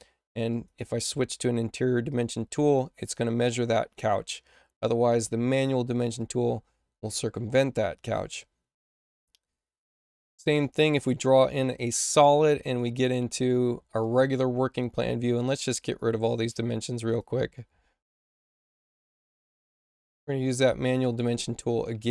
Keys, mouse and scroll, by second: 0.4 click, 2.0-3.0 drag, 5.0 click, 6.1-7.4 drag, 9.8 click, 10.8 click, 12.6 click, 13.9 click, 15.6 click, 16.4 space, 17.0 click, 20.3 click.